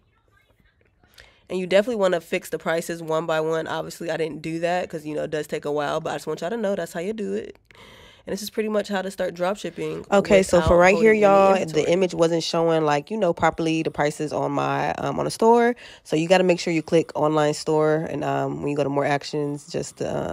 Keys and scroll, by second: 12.2 alt+q.